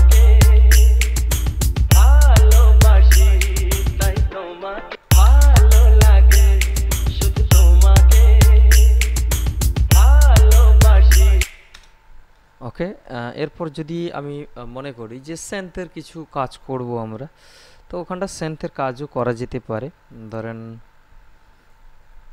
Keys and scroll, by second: 5.1 space, 11.6 space.